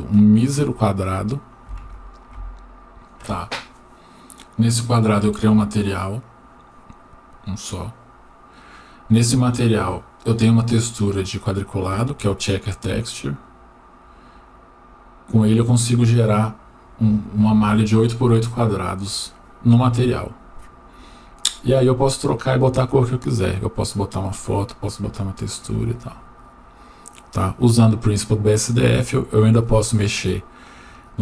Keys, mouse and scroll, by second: 0.2 click.